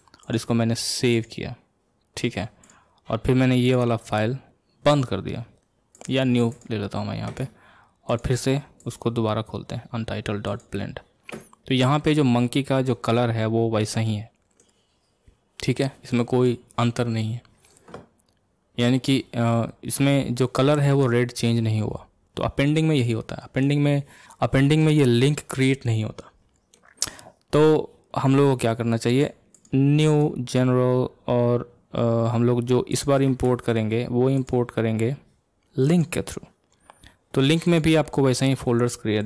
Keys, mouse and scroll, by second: 0.2-39.2 drag.